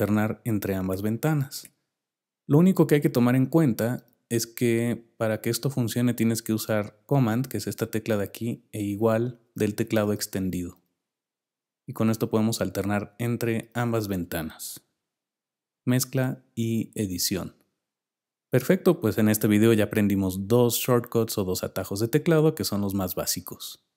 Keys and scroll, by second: 9.4 super+=, 14.7 super+=, 16.1 super+=.